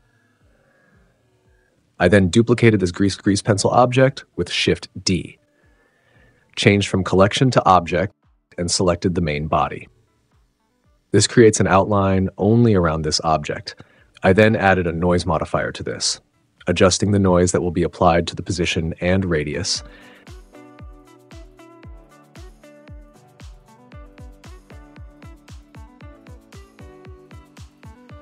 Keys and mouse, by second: 4.8 shift+d, 5.1 click, 6.5 click, 8.1-9.2 drag, 15.1 right click, 15.9-16.4 right drag, 16.7 click, 18.2 click, 19.9 click, 21.1 space, 23.1 click, 23.8 g, 27.6 super+z, 27.9 space.